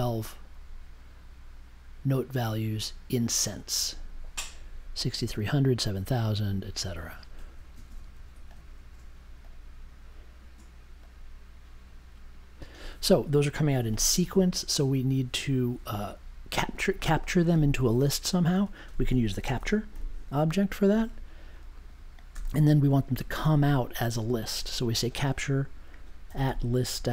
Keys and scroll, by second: 19.4 c, 19.9 p, 22.3 space, 24.4 shift+2, 26.2-27.1 typing.